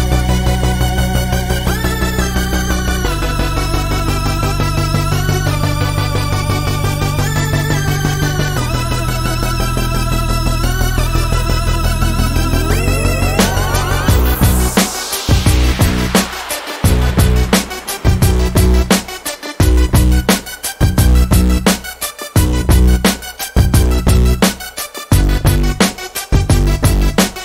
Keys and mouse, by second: 4.2 Tab, 5.5 z, 7.0 z, 7.4 Tab, 9.4 KP_1, 11.8-13.6 drag, 17.1 e, 20.7 drag, 23.1 s, 26.7 a, 27.2 a.